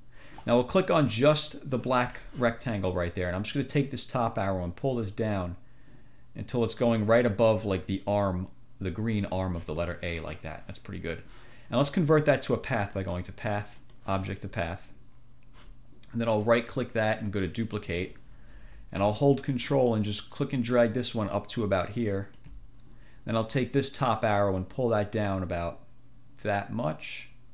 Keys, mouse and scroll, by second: 1.5 click, 4.3-7.2 drag, 13.0 click, 13.8 click, 16.5 click, 16.6 right click, 16.7 click, 17.6 click, 19.4-22.7 drag, 22.5 scroll up 1, 24.2-26.1 drag.